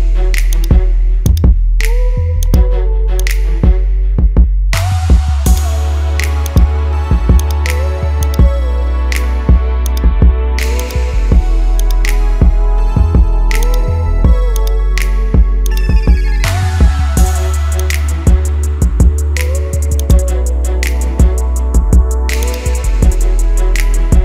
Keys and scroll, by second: 4.4 ctrl+z, 17.2 ctrl+z, 21.9 ctrl+z.